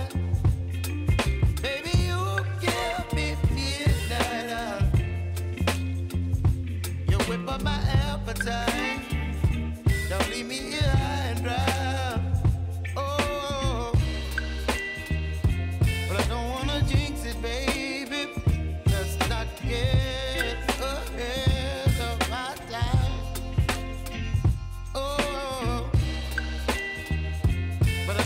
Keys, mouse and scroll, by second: 0.0-3.1 drag, 3.6 ctrl+d, 3.9 s, 4.4-7.2 drag, 7.6 ctrl+d, 8.0 s, 8.8-11.4 drag, 11.8 ctrl+d, 12.2 s, 12.6-15.3 drag, 15.7 u, 17.2 ctrl+a, 17.7 s, 18.4 click, 22.7 BackSpace, 23.1 -, 23.5 Return, 24.5 click, 26.1 Left, 26.7 -, 27.1 Return, 27.9 click.